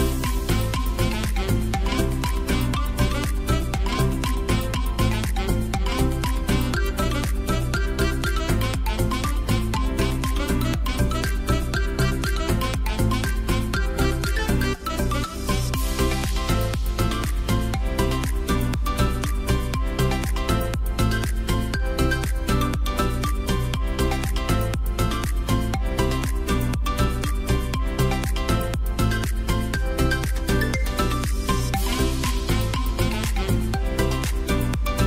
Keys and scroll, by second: 0.1 ctrl+d, 2.4 space, 9.7 space, 12.3-15.5 typing, 15.0 Escape, 20.4 a, 22.1 v, 31.1 ctrl+d.